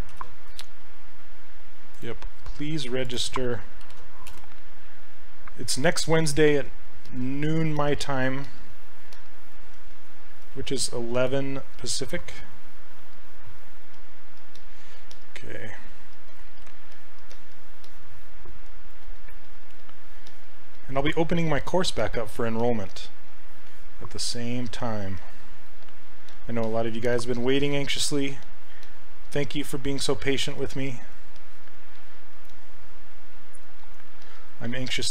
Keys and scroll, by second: 0.1 ctrl+c, 3.9 ctrl+v, 4.3 Return, 14.0 s, 20.8 s, 27.1 s.